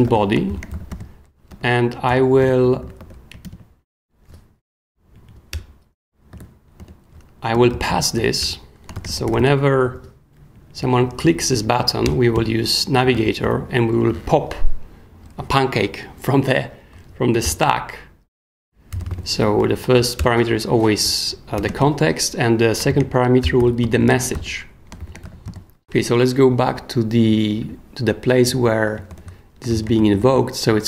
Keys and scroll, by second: 0.0-1.2 typing, 1.5 super+o, 2.1 Return, 2.6 super+k, 3.0 w, 3.4 super+., 5.1 Down, 5.5 Return, 6.3-9.8 typing, 7.5 super+o, 7.6 super+Escape, 8.4 Return, 10.5 Down, 11.8 Up, 12.0 Return, 12.3-13.9 typing, 17.4 shift+9, 18.7-19.6 typing, 21.6 ,, 21.7 space, 22.9-25.7 typing, 29.1 super+p, 29.6-30.7 typing.